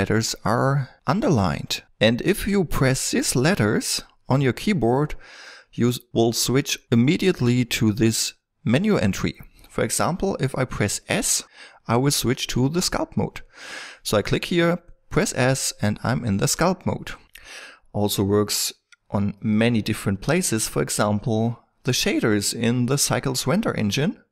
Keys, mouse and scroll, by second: 18.6-21.2 drag.